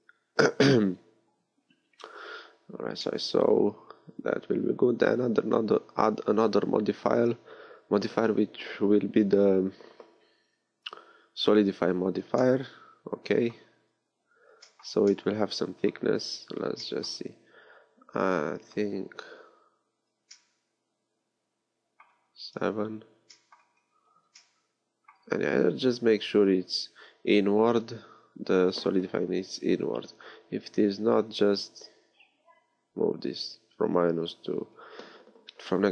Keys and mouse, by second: 2.2 middle click, 6.0-13.9 drag, 22.5 KP_7.